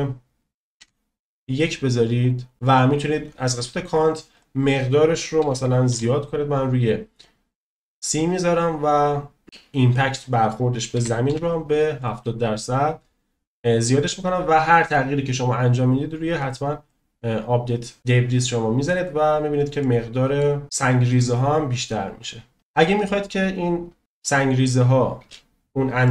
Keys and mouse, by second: 0.7-2.3 middle drag, 4.4-7.4 drag, 10.2-12.1 drag, 16.9 click, 19.8 middle click, 23.4 middle click, 24.0-24.3 shift+middle drag, 25.2 space, 26.0-26.1 shift+middle drag.